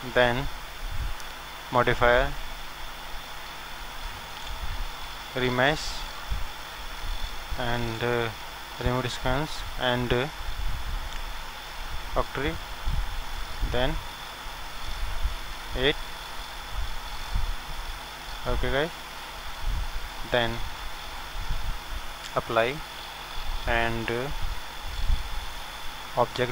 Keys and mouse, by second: 0.3-4.0 drag, 0.3-3.7 middle drag, 8.9-10.7 drag, 12.7-19.4 drag, 19.4-20.7 middle drag, 22.4-24.2 drag.